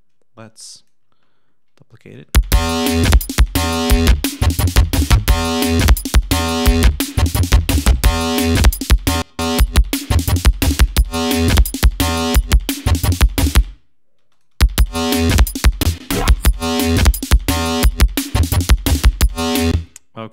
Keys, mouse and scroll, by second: 0.3 click, 1.1 ctrl+middle click, 2.0 ctrl+click, 2.2 space, 2.6-3.0 scroll down 2, 3.1 scroll up 2, 3.8 click, 6.1 click, 7.0 click, 8.9 click, 14.1 space, 14.2 click, 15.7 space, 15.8 click, 18.1 click, 18.8 click, 19.3-19.6 scroll up 2, 19.6 space.